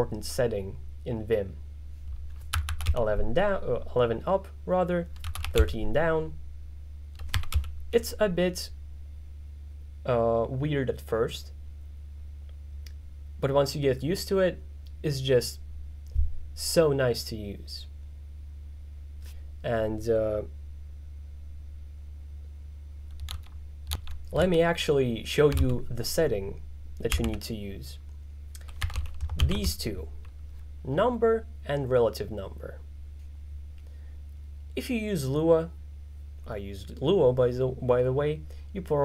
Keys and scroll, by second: 2.3-3.4 typing, 5.0-6.1 typing, 7.1-8.1 typing, 27.2 g, 27.3 g, 28.6-30.1 typing.